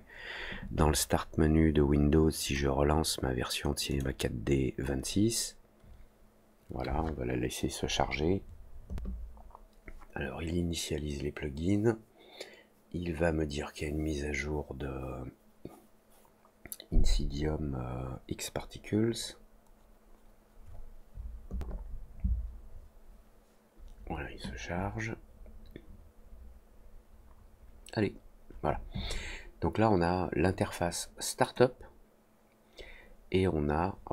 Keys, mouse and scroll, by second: 3.8 click.